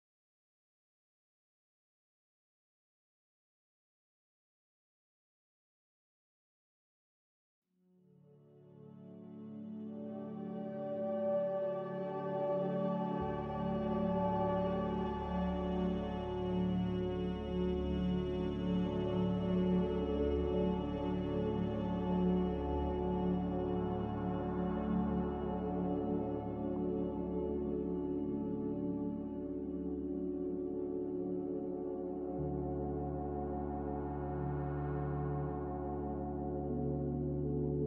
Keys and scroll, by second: 4.8 z, 9.2 5, 9.8 Return, 15.6 z, 21.3 c, 24.0 z, 33.5 Delete, 35.6 5, 36.8 0.